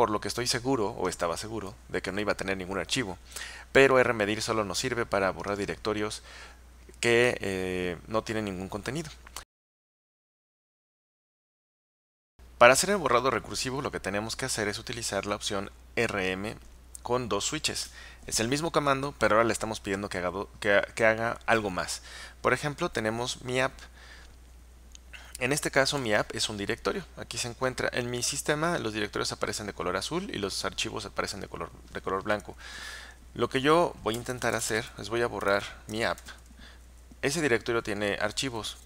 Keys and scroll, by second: 34.0-37.0 typing, 38.4 Return.